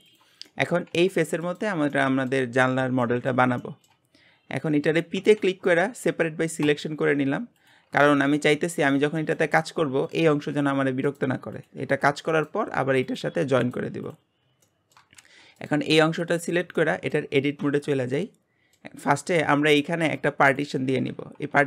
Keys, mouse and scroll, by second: 0.0 click, 0.5 shift+middle click, 0.9 g, 1.9 shift+middle click, 2.5-3.0 scroll up 1, 3.0-4.1 middle drag, 4.1-5.2 scroll up 1, 5.2 p, 7.3 Tab, 7.5 click, 8.1 g, 10.0 click, 10.3 g, 11.5 click, 11.8 g, 13.0 click, 13.2 g, 14.0 click, 14.3 scroll down 2, 14.6 shift+middle click, 15.2 g, 15.9-16.4 shift+middle drag, 16.4-16.8 scroll up 4, 16.8-17.6 shift+middle drag, 17.6 Tab, 18.1 middle click, 19.0-20.4 scroll down 2.